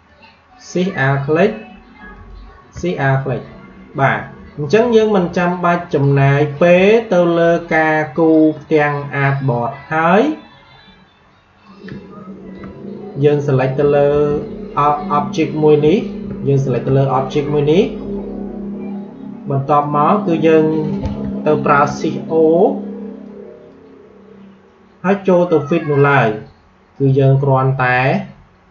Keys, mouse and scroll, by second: 6.6 space, 6.8 click, 7.1 space, 11.5-14.0 drag, 14.0 ctrl+z, 16.0-18.9 alt+drag, 21.4 shift+o, 23.1-28.7 drag.